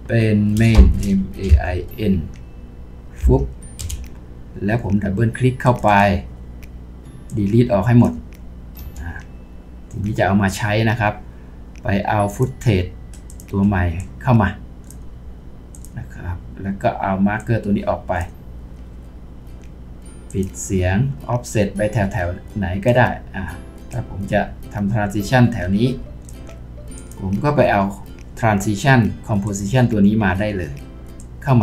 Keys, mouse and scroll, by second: 0.8-1.5 typing, 3.2 typing, 3.8 Return, 5.9 double click, 8.8 Delete, 13.3 shift+click.